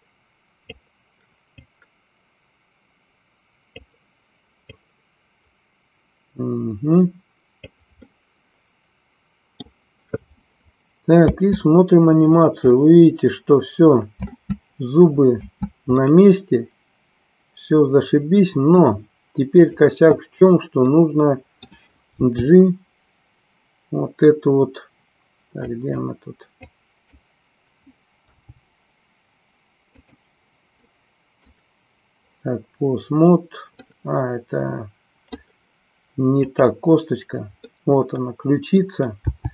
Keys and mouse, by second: 1.6-3.9 drag, 4.7-7.7 drag, 8.2-9.7 middle drag, 11.2 space, 12.8-14.3 middle drag, 15.4 space, 16.1-19.0 middle drag, 19.6 click, 21.0 middle click, 25.8 click, 26.6 click, 29.8 click, 30.9 middle click, 33.8-35.5 middle drag, 36.3 click, 37.7-38.9 middle drag.